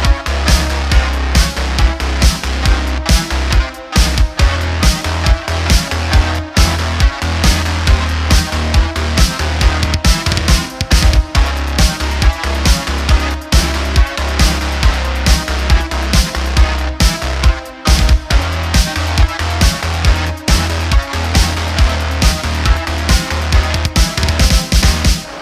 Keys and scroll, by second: 4.0 Tab, 5.4 Tab, 17.4 shift+a, 19.8 9, 19.9 0, 20.1 Return, 21.7 Tab, 25.3 Tab.